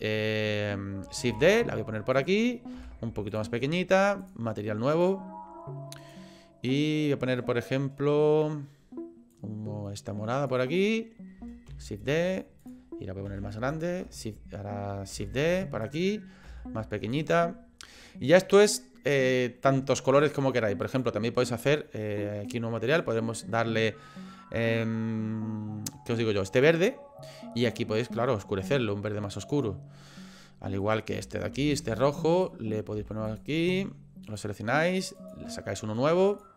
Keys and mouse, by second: 1.3 shift+d, 2.8 s, 4.2 click, 6.0 click, 11.7 shift+d, 13.3 s, 14.0 shift+s, 15.1 shift+d, 16.6 s, 20.9 click, 22.9 click, 30.8 click, 31.6 shift+d, 33.0 s, 34.2 click, 36.3 click.